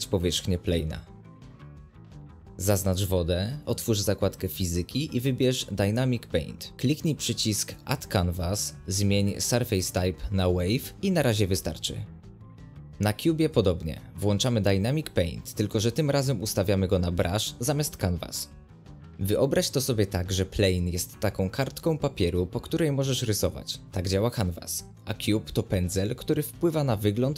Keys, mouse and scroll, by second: 0.6-1.2 middle drag, 1.2 click, 4.8-13.3 drag, 14.8-17.9 drag, 17.9-27.3 middle drag.